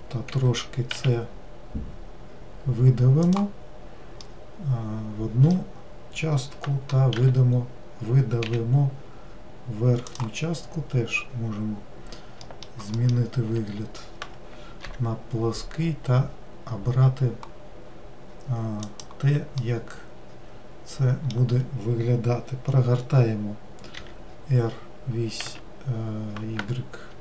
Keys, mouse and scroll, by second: 0.5 e, 4.4-7.3 middle drag, 7.3 e, 12.6 alt+middle click, 15.0 g, 19.7-22.8 middle drag, 24.1 r.